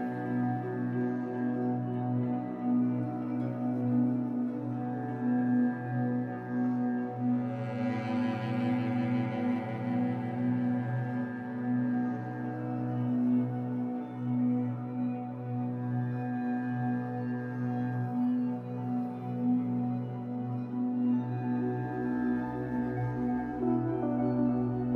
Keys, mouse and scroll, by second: 1.0 scroll up 1, 2.8 Tab, 4.0 scroll up 1, 5.9-7.6 drag, 7.6 middle click, 8.3-9.3 ctrl+drag, 9.9-11.6 ctrl+drag, 11.6 KP_1, 12.6 z, 13.6-16.1 shift+middle drag, 16.1 click, 16.9-19.5 shift+middle drag, 18.1-18.8 scroll up 2, 19.5 click, 20.3 KP_1, 21.0 g, 22.3 click, 23.3-24.9 middle drag, 24.2 KP_1, 24.8 g.